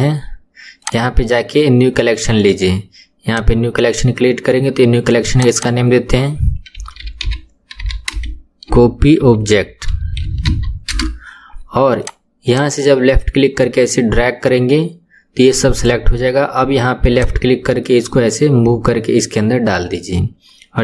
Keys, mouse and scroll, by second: 0.8 click, 2.4-5.4 right drag, 5.4 click, 5.5-8.7 drag, 12.0 click, 12.5 click, 17.1 click.